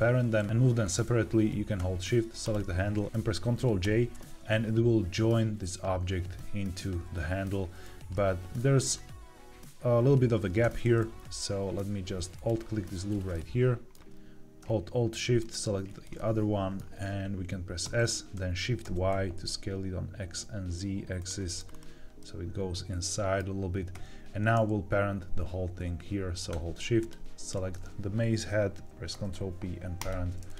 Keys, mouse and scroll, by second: 0.4 Tab, 2.3 shift+click, 3.0 ctrl+j, 3.0 ctrl+z, 3.7 ctrl+j, 8.0 middle click, 8.8-10.6 scroll up 2, 10.6 Tab, 12.2 alt+click, 13.2 middle click, 15.3 alt+shift+click, 16.1 middle click, 17.8 s, 18.7 shift+y, 21.1 click, 21.6-22.1 scroll down 2, 22.1-23.8 middle drag, 23.8 Tab, 26.9 shift+click, 29.0 ctrl+p, 30.4 click.